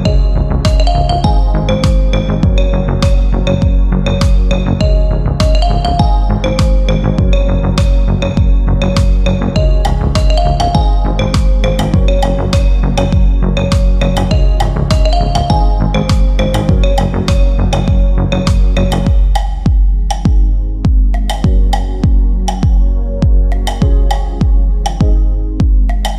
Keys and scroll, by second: 3.1 F3, 3.7 Escape, 9.9-11.7 typing, 22.9 F3, 23.2 F4.